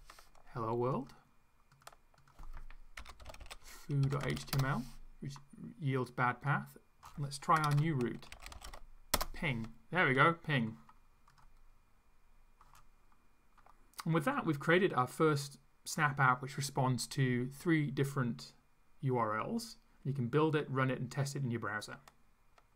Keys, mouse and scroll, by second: 1.0 click, 1.7 click, 2.2 click, 2.7-4.8 typing, 6.5 click, 7.6-9.1 typing.